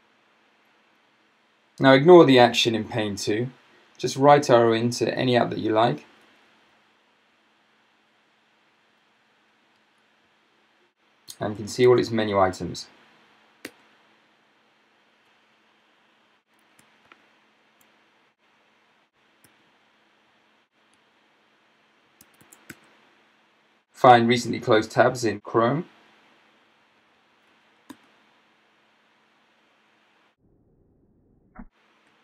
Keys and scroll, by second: 5.6 Down, 6.0 Down, 6.2 Down, 6.4 Down, 6.9-7.3 Down, 7.6 Down, 8.7 Down, 9.8 Right, 11.1-12.4 typing, 13.7 Return, 17.1 ctrl+alt+super+space, 19.5 c, 21.0 Right, 22.0-23.2 typing, 26.9 Down, 27.0 Down, 27.2 Down, 27.3 Down, 27.5 Down, 27.9 Return, 28.6 Return.